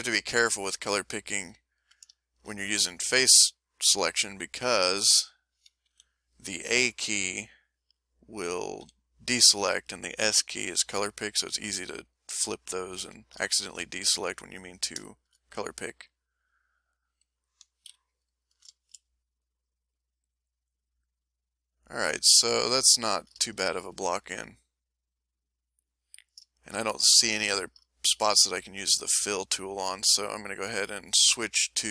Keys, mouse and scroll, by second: 0.1 a, 0.3 middle click, 1.2 middle click, 2.2 ctrl+shift+middle click, 5.9 l, 8.8 s, 12.1 middle click, 13.1 a, 13.6-14.6 shift+middle drag, 14.6-15.1 ctrl+shift+scroll up 2, 14.7 ctrl+shift+middle click, 15.1-16.8 ctrl+shift+middle drag, 17.9 m, 24.7-29.6 ctrl+shift+middle drag, 30.4 click, 31.2 click.